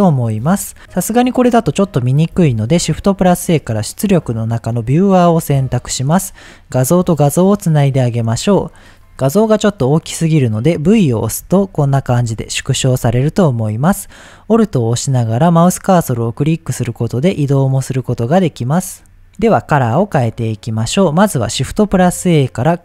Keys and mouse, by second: 0.8 shift+a, 2.5 shift+a, 6.2-7.1 drag, 10.9 v, 11.4 v, 12.2 v, 12.8 v, 15.4-18.1 alt+middle drag, 18.4 middle click, 19.3 v, 20.0 click, 20.7 click, 21.7 shift+a.